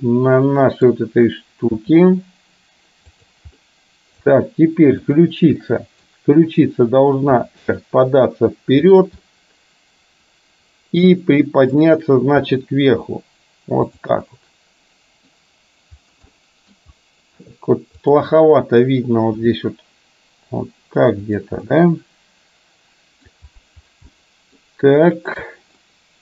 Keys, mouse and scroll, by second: 0.1-0.9 middle drag, 1.9 g, 3.8-4.4 middle drag, 5.8-6.1 middle drag, 7.5 r, 9.3-11.4 drag, 11.4 middle click, 12.5 r, 14.4-15.4 middle drag, 16.5 middle click, 19.5 g, 21.8-23.4 middle drag, 24.1-24.6 middle drag, 25.9-26.2 shift+middle drag.